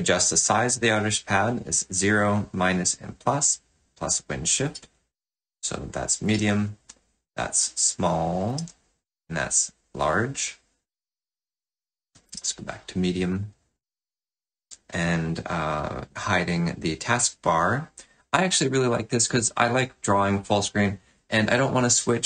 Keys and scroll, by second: 6.3 shift+super+~, 8.6 shift+super+=.